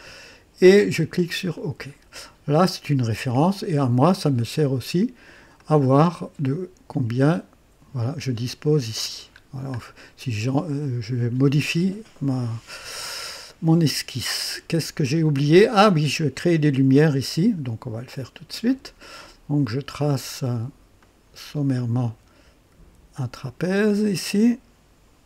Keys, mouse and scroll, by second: 1.5 click, 3.0-5.5 drag, 5.6 click, 9.4 scroll down 1, 9.8 right click, 13.3-14.4 right drag, 14.6 scroll down 2, 18.6 click, 21.0 click, 23.3 click.